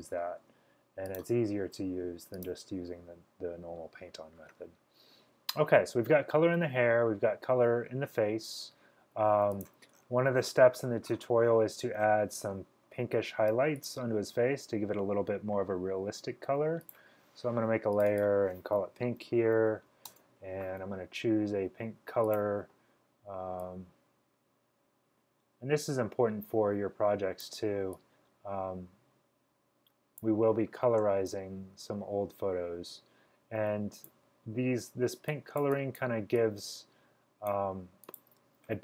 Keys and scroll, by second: 18.9-20.3 typing, 23.2 typing.